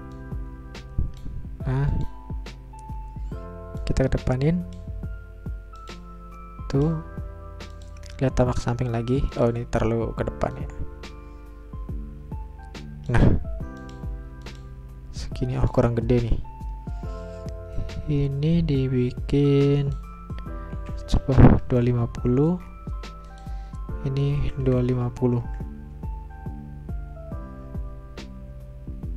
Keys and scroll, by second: 20.5-22.1 typing, 24.6-25.4 typing, 27.9 Return.